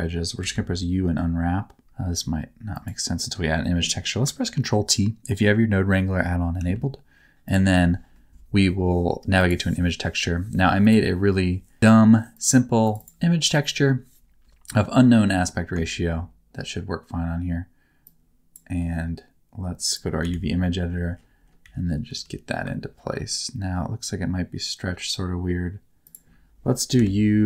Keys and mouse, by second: 0.4 u, 2.7 click, 3.2 click, 3.2 right click, 4.0 click, 4.0 right click, 6.6 ctrl+t, 7.4 click, 9.4 click, 15.1 middle click, 18.1 click, 19.8 click, 21.6 a, 22.1 r, 26.0 ctrl+click, 26.9 u.